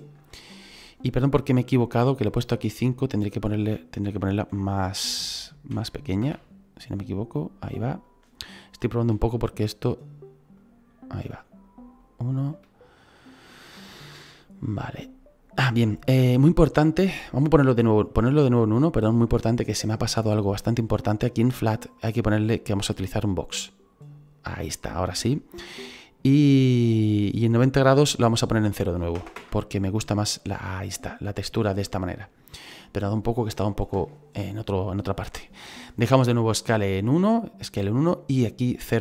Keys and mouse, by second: 2.7 click, 5.6 KP_1, 8.0 click, 9.1 KP_1, 9.9 click, 11.2 KP_1, 11.9 click, 21.9 click, 23.0 click, 28.0 click, 29.1 KP_0, 29.4 Return.